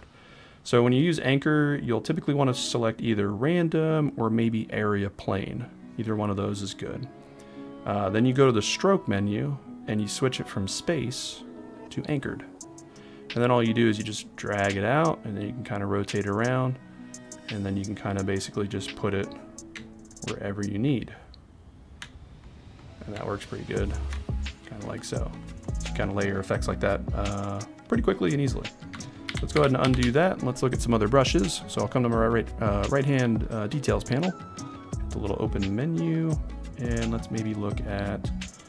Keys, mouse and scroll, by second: 8.7-12.2 drag, 13.8 click, 17.5 right click, 20.1 ctrl+click, 29.2 ctrl+z, 29.5 ctrl+z, 30.0 ctrl+z, 34.5 click.